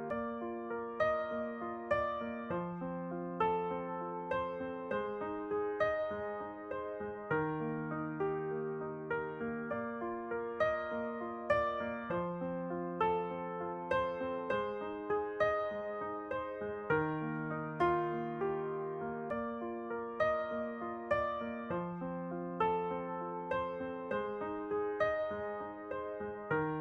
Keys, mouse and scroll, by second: 1.2 right click, 1.8 alt+s, 1.8-3.1 middle drag, 5.6-7.6 middle drag, 9.6 a, 9.8-11.9 middle drag, 11.9-14.9 drag, 15.7 e, 17.2 s, 19.1-20.8 drag, 20.4 s, 24.2-25.3 middle drag, 26.0-26.8 drag.